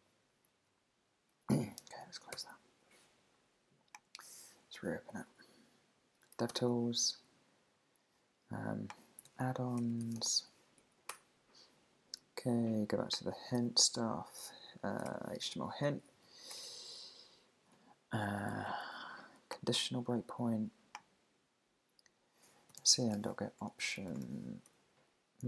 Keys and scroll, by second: 0.6 super+`, 1.8 super+w, 2.4 super+r, 4.7 shift+super+i, 6.5 alt+super+i, 10.8 Down, 11.1 Return, 13.6 super+f, 16.5 Return, 17.6 Return, 23.5 shift+o, 24.2 shift+9.